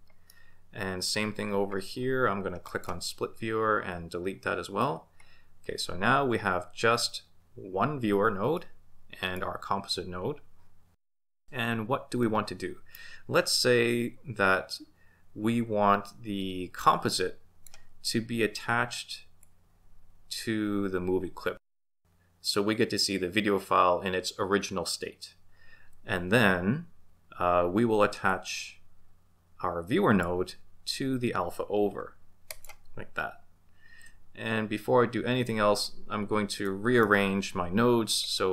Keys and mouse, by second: 0.4-1.2 middle drag, 2.7 click, 4.8 x, 8.6-9.5 middle drag, 12.2-13.1 middle drag, 16.9 click, 19.4-22.0 drag, 28.3-30.3 drag, 32.5 ctrl+shift+click, 36.7-37.1 middle drag, 38.2 click.